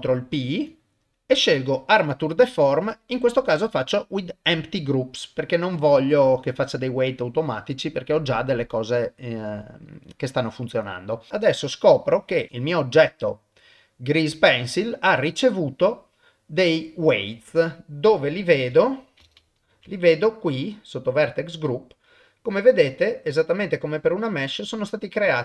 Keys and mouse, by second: 0.3 ctrl+p, 11.3 click, 17.4 middle click, 18.7 middle click, 20.1 middle click, 21.3 click, 21.8 middle click, 23.1-24.2 drag, 24.8 click.